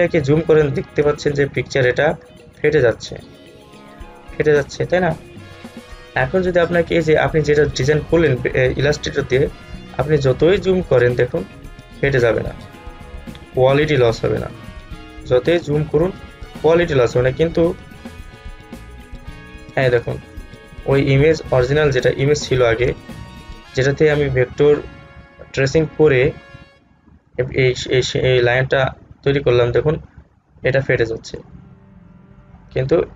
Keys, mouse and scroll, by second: 1.2 space, 1.4 click, 1.7 space, 2.5 alt+scroll up 1, 5.9 space, 6.1 click, 6.5 space, 9.6-9.9 alt+scroll up 1, 13.0 scroll down 1, 13.7 alt+scroll down 1, 14.7 alt+scroll up 1, 15.8 space, 15.9 click, 16.2 space, 17.1 click, 17.5 space, 20.8-21.5 alt+scroll down 1, 21.5 space, 22.2 alt+scroll down 1, 23.1 space, 23.2 click, 23.8-25.1 scroll down 2, 25.1 alt+scroll up 1, 26.5-27.0 scroll up 1, 27.4-27.7 scroll down 1, 28.7-29.2 alt+scroll down 1, 29.7 alt+scroll up 1, 32.9 space, 33.0 click.